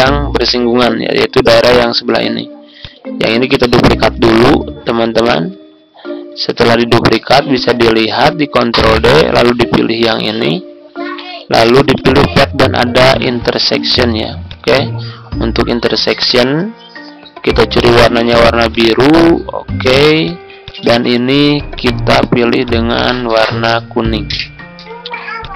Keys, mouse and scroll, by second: 4.3 ctrl+d, 7.5 click, 8.3 ctrl+z, 9.6 shift+click, 11.9-25.5 drag.